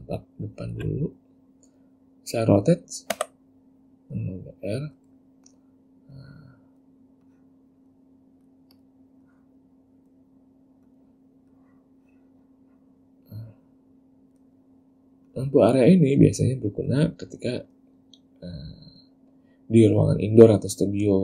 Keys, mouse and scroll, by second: 3.3 r, 5.3 middle click, 6.3 click, 7.4 click, 8.9 click, 9.4 click, 11.0 click, 11.7 click, 15.4 click, 17.0 click.